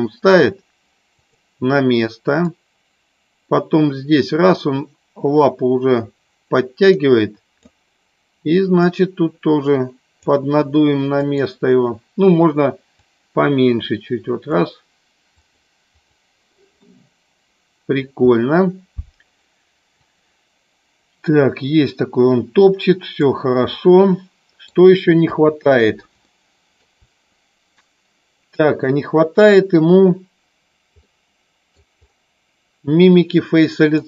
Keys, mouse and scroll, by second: 1.1 click, 2.5-7.6 drag, 8.9-10.1 drag, 11.1 click, 13.1-14.6 drag, 15.4 click, 16.7-17.9 middle drag, 20.0-23.3 drag, 23.7 middle click, 25.1 KP_3, 26.3 shift+middle click, 31.0 middle click.